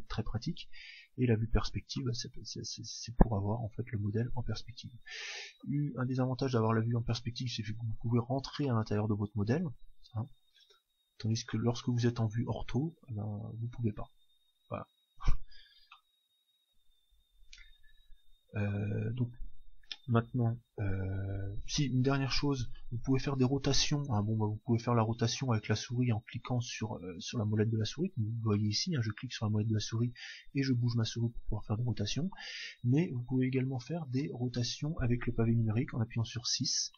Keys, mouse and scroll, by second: 1.3 KP_5, 1.9-3.9 middle drag, 6.2-13.4 middle drag, 6.2-7.2 scroll up 1, 12.1 KP_5, 13.4-14.4 scroll up 1, 14.4 scroll down 1, 14.5 scroll up 1, 14.8-15.4 scroll down 1, 15.4-17.9 scroll up 1, 23.7 KP_6, 25.2-27.3 middle drag, 28.5-30.4 middle drag, 35.9-36.9 KP_6.